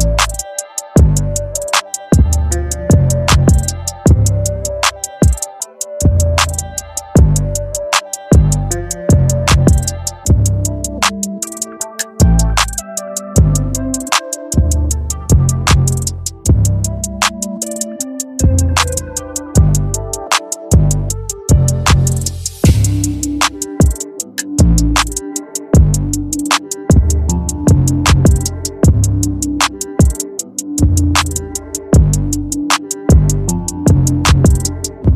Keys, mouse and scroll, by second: 12.6 Delete, 13.0-15.3 drag, 16.8 z, 17.1-24.8 drag, 25.3 click, 27.3 click, 28.7-30.8 alt+shift+drag, 34.7 alt+shift+click.